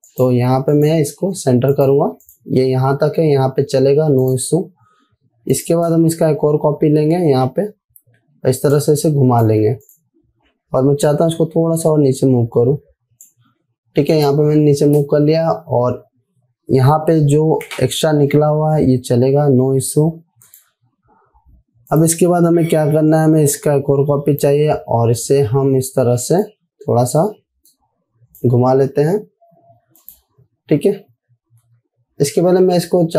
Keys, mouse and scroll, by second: 1.2 alt+click, 6.8 ctrl+c, 9.2-10.1 drag, 20.9-30.5 drag, 24.3-24.9 alt+drag, 27.2-29.1 click, 32.6 ctrl+z.